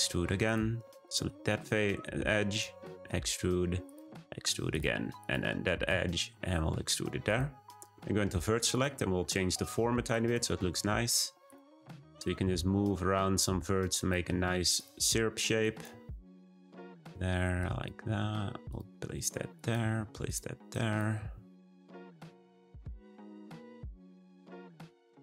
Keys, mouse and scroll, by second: 1.0 click, 2.5 e, 4.0 e, 5.1 click, 5.8 e, 8.7-10.1 drag, 10.5 g, 12.0 click, 12.4 g, 13.9 click, 14.2 g, 15.6 click, 15.9 g, 17.6 click, 18.0 g, 19.5 click, 19.8 g, 20.7 click, 21.1 g, 21.9 click, 22.3 g, 23.6 click, 23.9 g, 24.6 click, 24.9 g.